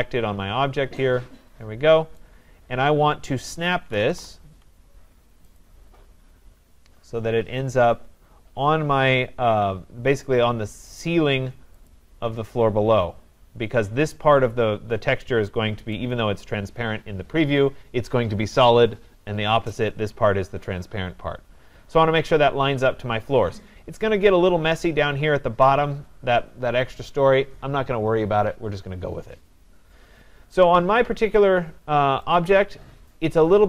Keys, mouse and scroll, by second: 0.7 scroll, 2.2 right click, 3.1-4.5 typing, 5.6 click, 9.3-10.7 drag, 11.9-17.0 drag, 19.7 right click, 21.8-22.3 scroll, 22.7-24.3 scroll, 24.3-27.7 scroll, 29.5-30.1 scroll, 30.9 scroll, 31.1-31.4 scroll up 11, 32.3 right click.